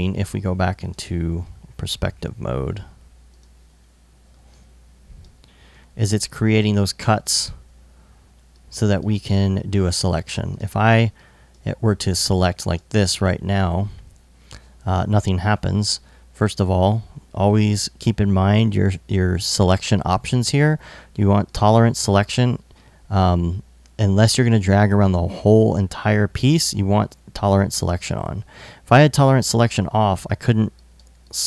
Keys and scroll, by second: 3.2 s, 4.0 alt+s.